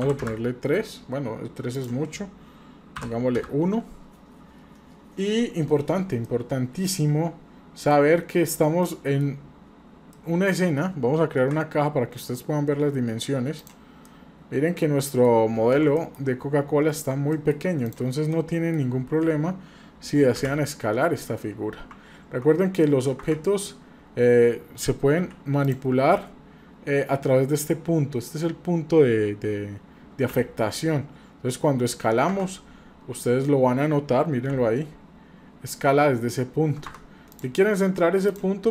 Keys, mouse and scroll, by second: 1.8-5.8 drag, 6.2-7.9 middle drag, 8.0-8.5 scroll down 3, 8.8-9.2 middle drag, 8.8 scroll down 1, 9.4-9.9 scroll down 3, 10.1-10.5 middle drag, 10.1 scroll down 2, 10.7 scroll up 1, 11.4 shift+a, 14.1-15.3 middle drag, 15.8 shift+z, 16.0 middle click, 16.3-17.1 scroll up 3, 17.1 scroll down 2, 17.3 middle click, 17.8 click, 18.3 middle click, 18.9-19.2 scroll up 2, 19.5 scroll down 1, 19.6 scroll down 1, 20.4-21.1 scroll down 1, 20.4 g, 23.7-24.0 scroll up 2, 25.1 scroll up 2, 25.2 g, 32.7-33.5 scroll down 3, 34.5 scroll down 1, 34.5 s, 37.3 drag, 37.9 scroll up 1, 38.2 click.